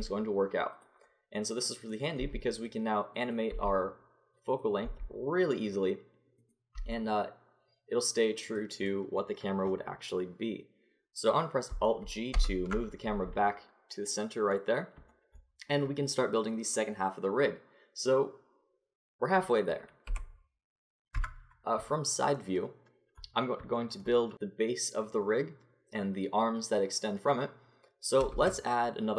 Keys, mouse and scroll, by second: 2.2 g, 3.2-4.8 right drag, 3.5 g, 5.0 g, 6.8 g, 12.3 alt+g, 20.1 KP_1, 21.1 KP_3, 28.3 shift+a.